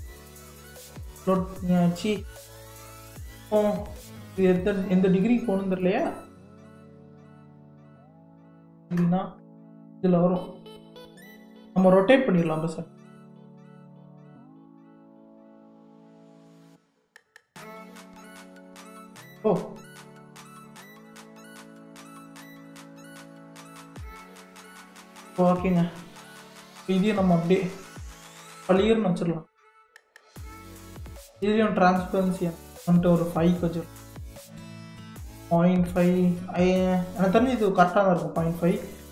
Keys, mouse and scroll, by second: 1.2-3.0 middle drag, 3.0 click, 4.6-5.9 drag, 7.2-10.2 drag, 13.4 r, 22.8-24.7 middle drag, 24.7 KP_3, 25.4-26.6 scroll up 3, 26.6 g, 32.1 click, 33.1-36.3 drag, 37.7 scroll up 4, 38.4-39.1 shift+middle drag.